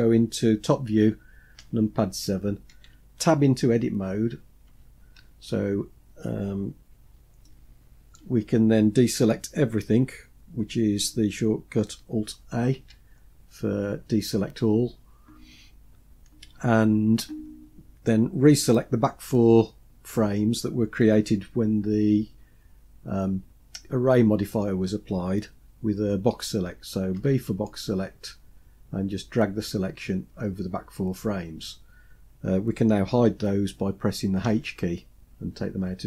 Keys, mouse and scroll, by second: 1.6 KP_7, 4.7 Tab, 7.4-8.2 shift+middle drag, 12.8 alt+a, 27.2 b, 34.4 h.